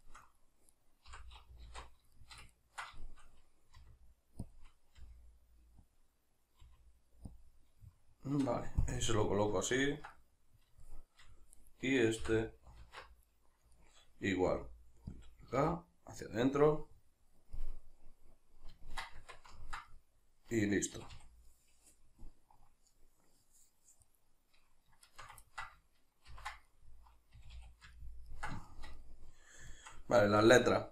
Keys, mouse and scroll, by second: 0.7 right click, 1.1 l, 2.2-4.6 shift+middle drag, 3.8 r, 4.6 click, 5.0 g, 6.0 click, 6.6 r, 7.4 click, 7.8-11.6 middle drag, 9.0 KP_Decimal, 11.6 right click, 12.2 l, 13.8-15.2 shift+middle drag, 14.5 r, 15.2 click, 15.6 g, 16.6 click, 16.8-20.9 middle drag, 19.1 Tab, 20.9 a, 21.5-24.0 middle drag, 24.0 right click, 25.0 shift+right click, 25.4-28.0 ctrl+middle drag, 26.3 ctrl+j, 27.4 a, 30.4 alt+q.